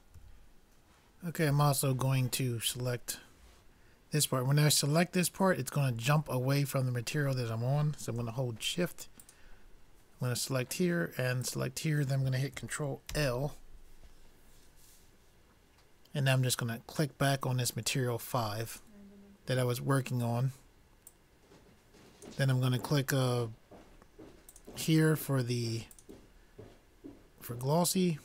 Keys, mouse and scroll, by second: 0.7 n, 9.8-13.1 drag, 13.1 ctrl+l, 22.5-26.2 drag.